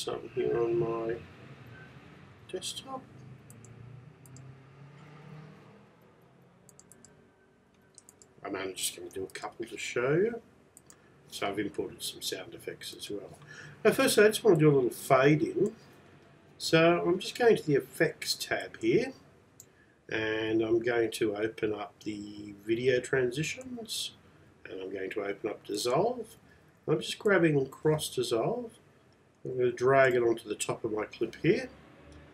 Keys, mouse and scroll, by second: 13.0 click, 27.9 click.